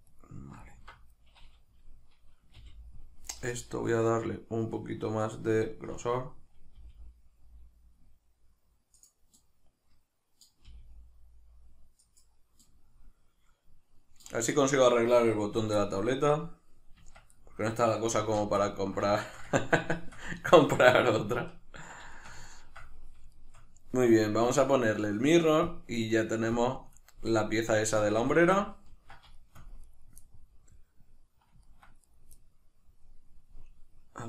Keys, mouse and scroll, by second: 0.1 right click, 0.6 alt+right click, 1.8-5.4 middle drag, 2.6 g, 5.4 right click, 6.8 g, 9.0 click, 9.4-12.1 middle drag, 10.7 g, 12.1 click, 12.6-17.4 middle drag, 14.5-16.0 scroll down 2, 17.0 Tab, 18.2 alt+q, 18.7-19.1 ctrl+middle drag, 22.2-24.5 ctrl+shift+middle drag, 24.5-28.6 drag, 28.0 a, 28.6-29.9 ctrl+middle drag, 29.9 right click, 30.2-32.0 middle drag, 32.0 right click, 32.4-34.2 middle drag.